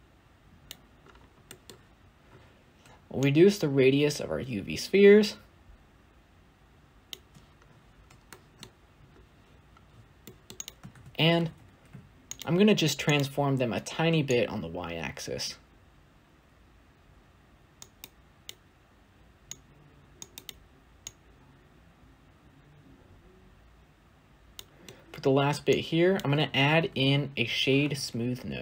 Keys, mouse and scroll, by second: 0.6 click, 3.3-6.4 shift+drag, 7.5-8.1 scroll up 1, 8.1-8.5 shift+middle drag, 8.5-10.3 scroll up 2, 10.3-11.0 scroll up 1, 11.0-11.6 scroll up 1, 11.6-12.2 scroll up 1, 12.2 shift+a, 15.5-17.7 shift+drag, 19.6-24.7 shift+drag, 26.8 s.